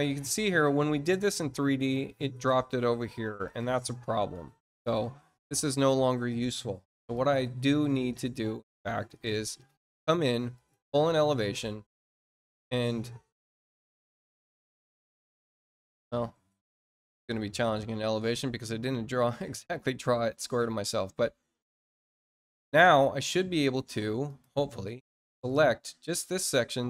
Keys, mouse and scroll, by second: 3.4 click, 7.1 click, 8.7 middle click, 10.5 click, 14.3-17.5 drag, 19.5-19.9 scroll up 2, 20.1-20.7 scroll up 4, 20.9 middle click, 22.2 click, 23.5 click, 24.2 click, 24.8 click.